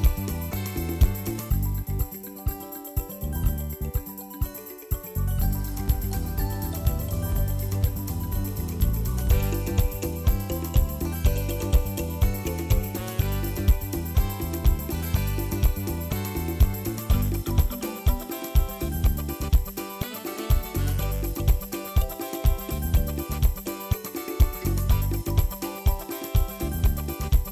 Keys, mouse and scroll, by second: 0.2 scroll down 1, 0.4 middle click, 0.9-2.4 drag, 2.4 shift+middle click, 3.3 click, 5.7 scroll down 3, 5.9 shift+middle click, 6.7 click, 8.5-8.9 drag, 10.5 ctrl+s, 10.8 scroll down 3, 11.0 shift+middle click, 11.3 ctrl+s, 12.5 click, 12.9 middle click, 13.5 ctrl+s, 13.8 click, 14.2 scroll up 3, 14.5 shift+middle click, 14.9 ctrl+s, 15.2 click, 16.7 click, 17.2 click, 17.7 scroll down 5, 17.8 KP_3, 18.4 r, 21.7 KP_7, 22.1 g, 22.8 ., 23.1 r, 24.3 KP_3, 24.6 r, 26.6-27.1 scroll up 4, 27.1 click.